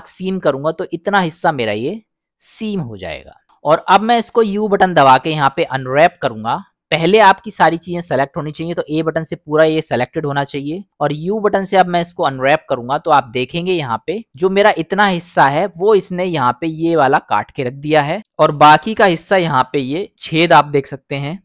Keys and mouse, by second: 0.8-1.8 middle drag, 2.9 middle click, 4.2 u, 8.7 a, 11.1 u, 14.1 middle click, 16.1 middle click.